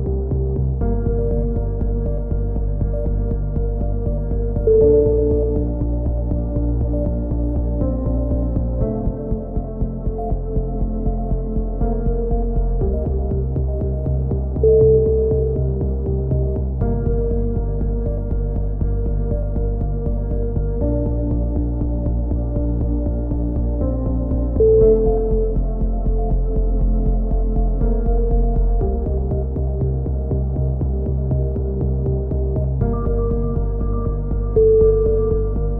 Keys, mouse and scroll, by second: 0.1-1.1 drag, 1.2 right click, 1.9 middle click, 2.7-3.9 right drag, 2.7 z, 4.4-6.3 drag, 6.2 ctrl+KP_7, 6.4 middle click, 6.8-7.8 drag, 8.1 ctrl+z, 9.9 a, 10.1-11.5 middle drag, 10.1 z, 10.8 z, 11.1 z, 12.8-14.2 drag, 14.2 z, 14.6 a, 15.1 z, 16.1 z, 16.7 click, 18.2 z, 18.6 z, 19.7 click, 21.8 right click, 22.2 click, 23.4 a, 24.3 z, 25.3 click, 26.1 click, 28.3 ctrl+KP_7, 28.6 z, 31.3-33.9 typing, 35.0 s.